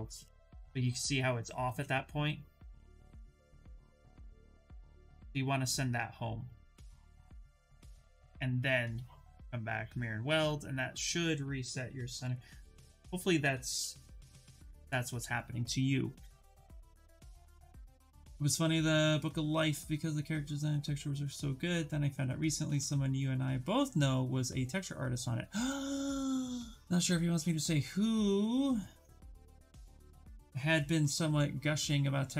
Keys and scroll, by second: 1.3 ctrl+z, 1.7 w, 3.3 x, 9.0 2, 11.3 q, 11.8 b, 13.4 x.